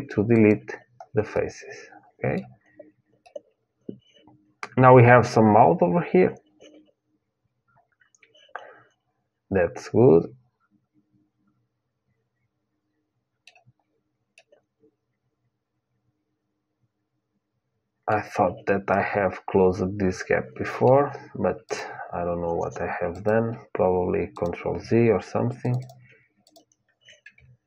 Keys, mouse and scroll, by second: 1.1-4.9 middle drag, 13.5-16.1 middle drag, 18.6-20.6 middle drag, 21.4-27.6 drag.